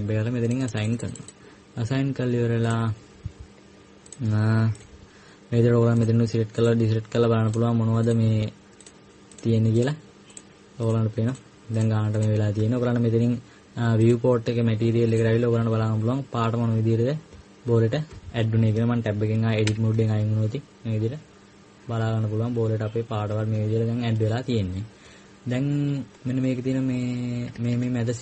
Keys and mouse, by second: 17.2 middle click, 20.5 Tab, 20.9-23.1 middle drag, 24.5-28.2 middle drag.